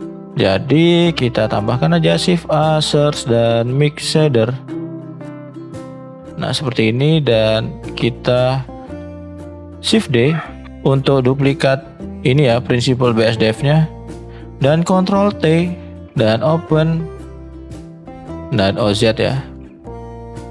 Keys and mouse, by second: 0.0 shift+middle click, 0.5 middle click, 1.9 shift+a, 9.9 shift+d, 15.3 ctrl+t, 16.0 click.